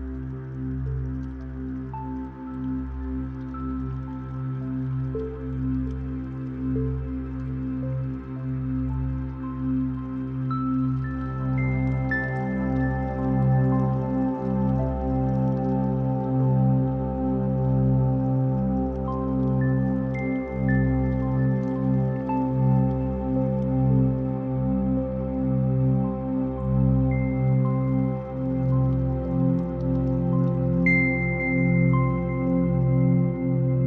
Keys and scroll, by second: 11.2 ctrl+t, 29.0 ctrl+z, 30.3 ctrl+t.